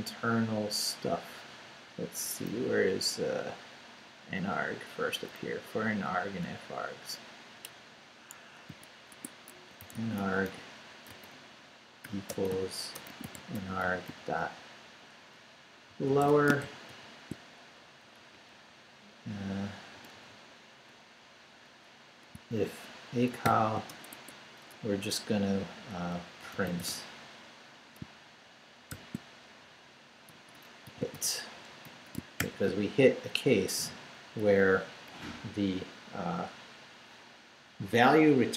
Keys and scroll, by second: 1.2 Up, 2.2 Up, 4.3 Down, 5.3 Down, 5.4 Down, 5.9 Up, 6.5 Left, 7.3 Left, 8.4 Escape, 8.7-14.3 typing, 9.1 Tab, 15.6-17.4 typing, 17.7 shift+Down, 19.9 Right, 23.4 shift+;, 23.9 shift+Return, 24.1 Tab, 26.2-27.4 typing, 28.9 shift+9, 30.3-32.4 typing, 33.9 Up, 34.4 Down, 35.1 Up.